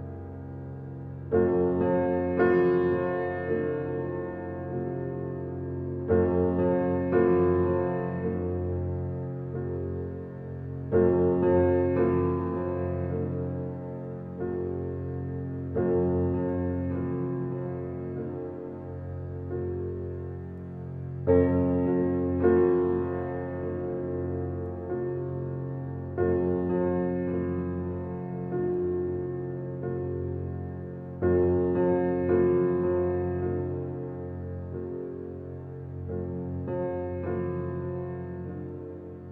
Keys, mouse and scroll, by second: 3.3-4.2 scroll down 1, 11.0-12.5 scroll down 1, 12.9 ctrl+s, 15.9-16.2 scroll up 1, 20.5 click, 21.5-21.8 scroll up 1, 24.0 scroll up 1, 26.3 typing, 28.3-29.8 scroll up 1, 29.8 click, 34.9 typing, 34.9-35.4 scroll down 1, 35.4 scroll up 1, 35.8 right click, 36.6 click, 38.5 right click, 39.0-39.3 scroll down 1.